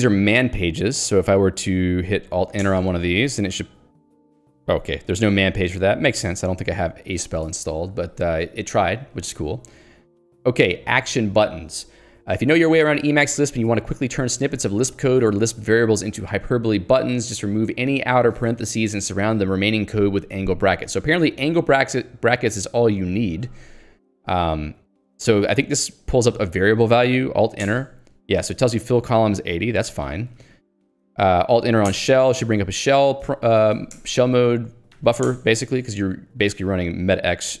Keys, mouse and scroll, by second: 0.0 k, 1.2 j, 2.8 alt+Return, 5.2 ctrl+click, 5.7 Escape, 6.0 k, 6.4 alt+Return, 7.5 Escape, 7.8-9.4 typing, 14.1 k, 15.0 l, 17.7 j, 17.9 h, 20.8 j, 25.1 l, 27.7 alt+Return, 29.9 Escape, 30.1 k, 32.0 alt+Return, 33.3 Escape, 34.0 Return, 34.7-35.6 typing, 36.5 alt+x, 37.1-37.6 typing.